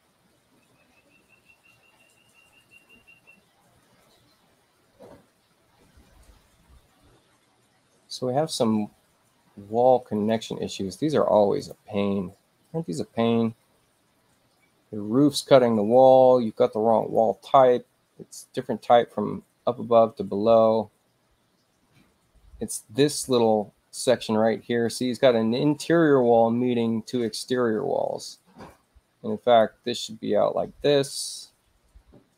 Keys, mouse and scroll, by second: 10.1 click, 11.1 space, 11.6 click, 17.0 click, 23.2 click, 24.8 click, 27.2 click, 28.7 click.